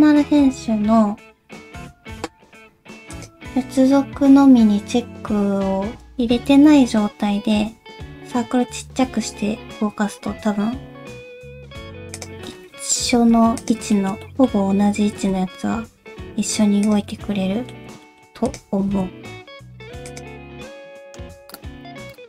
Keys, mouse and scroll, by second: 0.2 alt+i, 1.3 alt+o, 3.1 click, 5.3-6.2 scroll up 1, 8.2 g, 12.4 middle click, 13.1 alt+z, 13.6 click, 13.9 shift+middle click, 14.2 middle click, 15.1 g, 17.1 middle click, 18.0 shift+middle click, 18.5 click, 18.8 g, 20.4 scroll down 1, 20.6 middle click, 21.2-21.5 scroll up 2, 21.5 click, 21.8 g, 22.2 middle click.